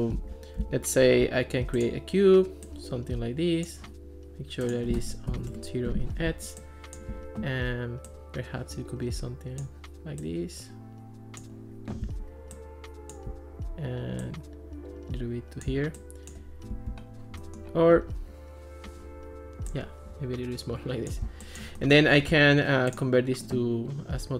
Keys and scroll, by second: 0.2 alt+r, 5.3 0, 5.5 Return.